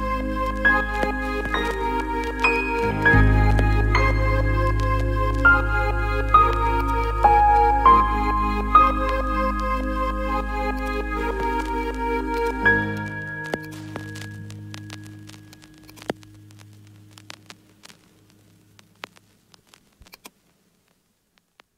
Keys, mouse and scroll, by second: 0.9 KP_0, 4.7 r, 4.9 r, 6.3 drag, 6.8 drag, 7.3 r, 7.5 r, 11.2 r, 11.3 r, 12.3 click, 13.1 KP_0, 13.5-14.1 alt+middle drag, 14.2 z, 15.1 KP_0, 19.3 KP_0, 20.1-21.7 alt+middle drag.